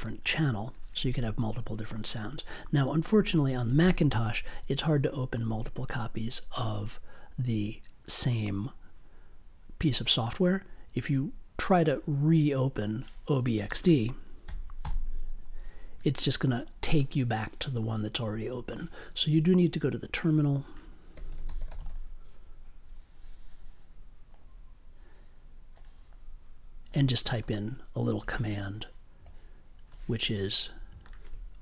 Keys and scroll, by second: 14.4 o, 14.8 b, 20.9-22.3 typing.